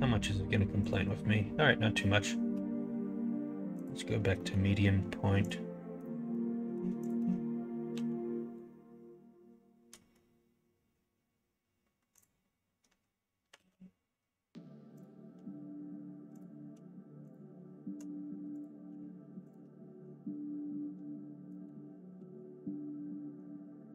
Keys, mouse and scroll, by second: 4.4 middle click, 5.4 click, 6.0 middle click, 7.0 alt+click, 7.9 e, 13.4 s, 17.2 shift+click, 18.4 click, 19.4 ctrl+click, 21.5 middle click, 22.1 e.